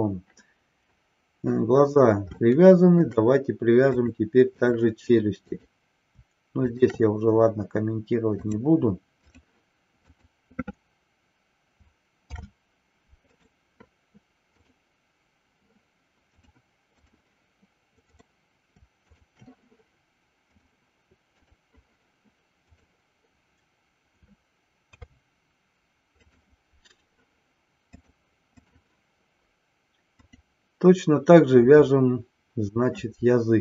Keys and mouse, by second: 2.5-3.1 shift+middle drag, 3.9-4.8 drag, 5.5 click, 6.5 shift+click, 8.4-9.4 drag, 10.1 click, 12.3 ctrl+p, 14.5-15.7 drag, 16.5 click, 18.1 click, 19.1 shift+click, 20.5-21.5 drag, 24.8 ctrl+p, 28.0-28.8 drag, 30.1 click.